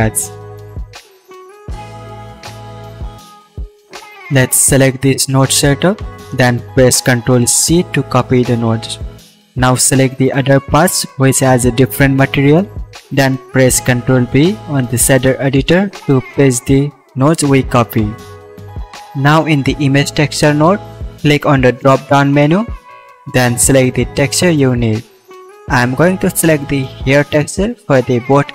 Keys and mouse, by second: 5.1 ctrl+c, 7.7 click, 8.4-10.9 drag, 9.8 ctrl+v.